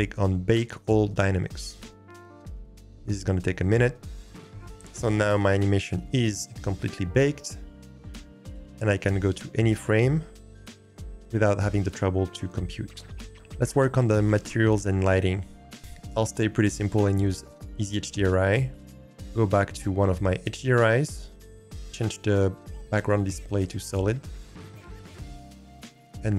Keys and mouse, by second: 1.1-4.6 drag, 9.2-13.3 drag, 18.7-21.5 drag, 23.5 click, 25.7-26.3 drag.